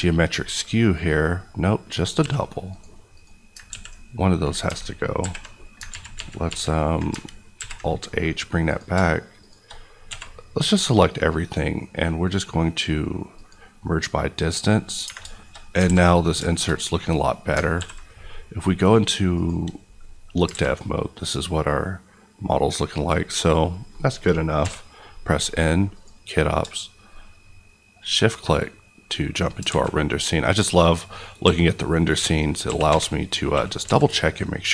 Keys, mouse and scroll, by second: 0.0 KP_Decimal, 0.4 middle click, 0.6-1.0 scroll down 1, 1.0 middle click, 1.9 click, 2.1 g, 2.6 right click, 3.1 click, 3.6 ctrl+x, 4.0-4.6 scroll down 1, 4.6-5.1 alt+scroll down 1, 5.1 alt+h, 5.5 scroll down 2, 5.8 ctrl+z, 7.5 alt+h, 8.0 middle click, 8.2-8.6 scroll up 1, 8.6 click, 10.0 a, 10.7 right click, 13.3 click, 14.1-15.0 scroll down 1, 15.0 Tab, 15.3 middle click, 15.6-16.3 scroll down 3, 15.8 alt+a, 16.0 middle click, 16.5 shift+middle click, 17.0-17.7 scroll up 2, 17.7 ctrl+s, 19.3 click, 19.9 middle click, 20.2 scroll up 2, 20.4 alt+a, 20.7-22.7 middle drag, 22.7 scroll down 1, 24.5 n, 25.9 click, 29.7 alt+a, 30.6 click, 31.4 s, 32.3 click, 32.6 g, 32.9 y, 33.8 x.